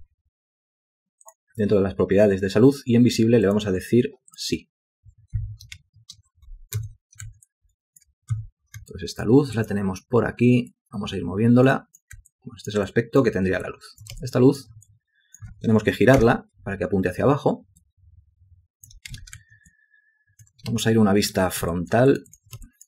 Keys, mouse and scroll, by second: 5.9 ctrl+space, 6.9 a, 7.6 alt+click, 8.5 w, 9.0 alt+click, 9.7 alt+click, 12.4 alt+click, 13.0 alt+click, 13.8 ctrl+alt+click, 14.3 alt+shift+click, 15.0 alt+click, 16.3 y, 17.9 ctrl+click, 19.2 space, 19.8 alt+click, 20.8 ctrl+space, 21.9 ctrl+alt+click, 22.2 ctrl+alt+click, 22.3 ctrl+alt+double click, 22.4 ctrl+alt+click, 22.8 shift+click.